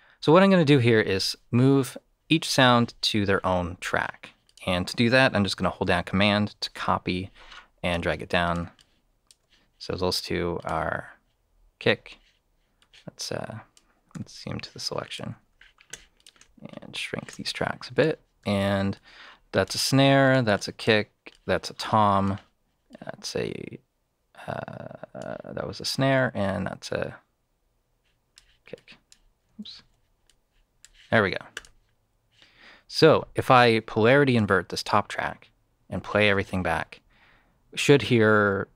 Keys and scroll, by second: 14.1 e, 29.7 super+z.